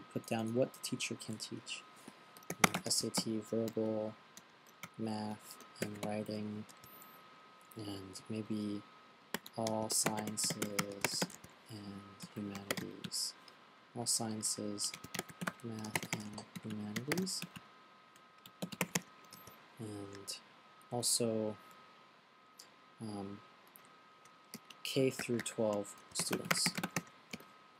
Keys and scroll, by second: 2.7-7.0 typing, 9.5-20.2 typing, 24.1-27.7 typing.